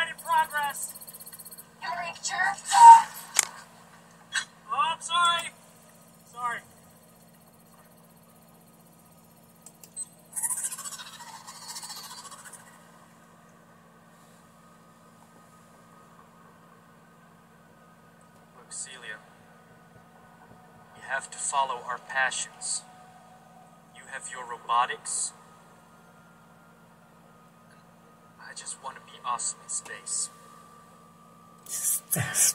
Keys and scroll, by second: 1.2 super+5, 11.9 super+5, 13.1 super+6, 18.4 Escape, 22.6 super+1, 27.2 super+2.